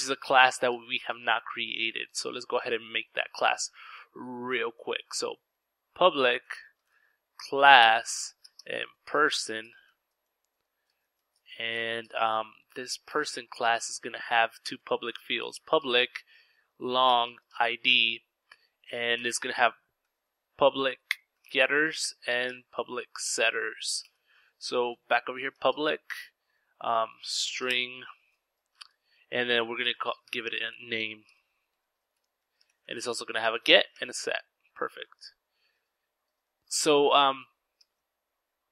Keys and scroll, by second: 2.9 Return, 3.1 Return, 3.2-11.5 typing, 12.8-29.0 typing, 30.1-34.6 typing, 36.3 Return, 36.3 typing.